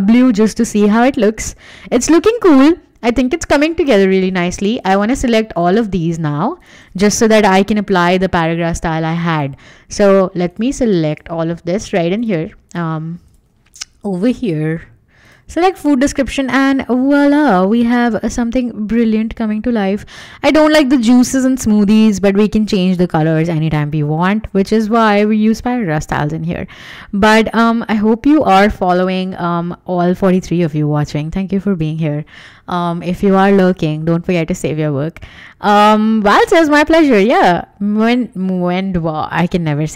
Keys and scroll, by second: 3.8 w, 16.0 Escape, 17.5 w.